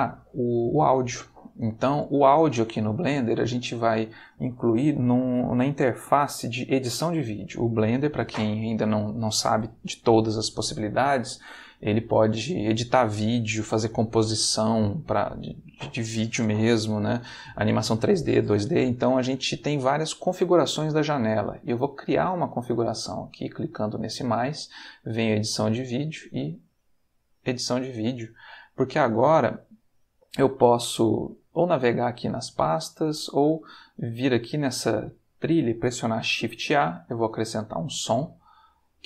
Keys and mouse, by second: 22.7 click, 26.9 click, 28.5 middle click, 32.1-33.2 middle drag, 34.1 click, 36.2 shift+a, 37.4 click, 38.9 click.